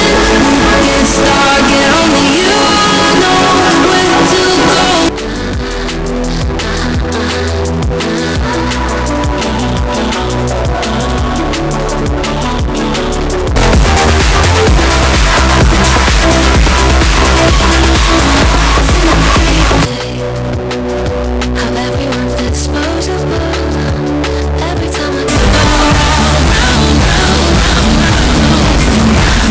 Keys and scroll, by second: 5.0 Page_Down, 20.0 Page_Down.